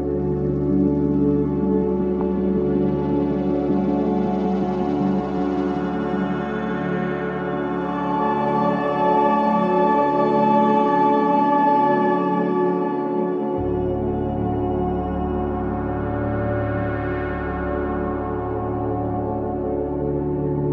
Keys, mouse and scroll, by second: 0.2 ctrl+z, 2.1 click, 7.5 F7, 8.9-10.3 alt+middle drag, 10.3 click, 13.2 ctrl+z, 14.5 click, 15.5 ctrl+z, 16.1 click, 20.4 scroll down 1.